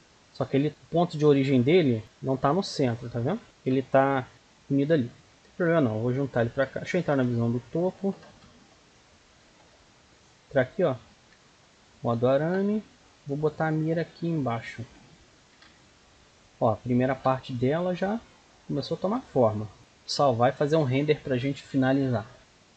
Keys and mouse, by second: 0.7 Tab, 1.1 a, 1.8 a, 2.3 Tab, 3.4 ctrl+z, 4.0 a, 4.3 a, 4.6 click, 7.0 KP_7, 9.8-11.1 middle drag, 11.1 z, 14.7 z, 15.3 middle click, 16.0 middle click, 16.2 KP_1, 17.0 middle click, 17.2 Tab, 17.5-18.8 middle drag, 19.8 KP_0.